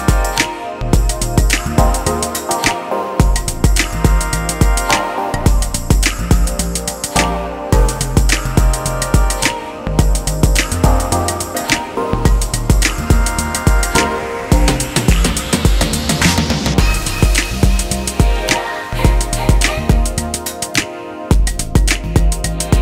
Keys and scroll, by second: 22.4 ctrl+space.